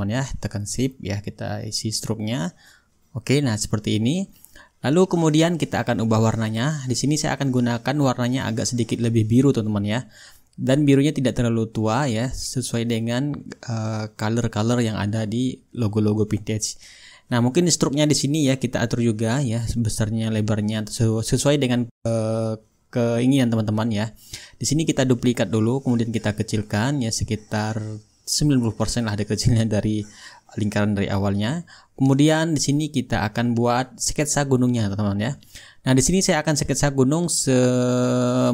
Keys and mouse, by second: 3.0-4.2 shift+drag, 6.9-8.0 drag, 8.6-15.6 drag, 15.7-19.0 shift+right drag, 17.7-19.0 drag, 24.3-25.4 right drag, 25.6-29.3 drag, 33.3-34.4 drag, 36.7-38.5 drag.